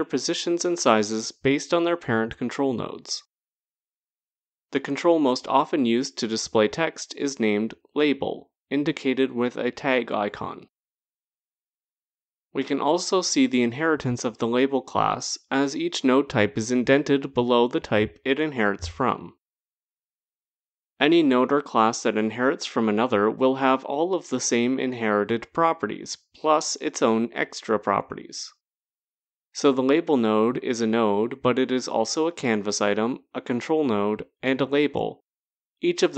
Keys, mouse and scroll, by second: 3.8 click, 4.8-6.2 typing, 9.9 typing, 21.8 click, 24.6 click, 27.3 click.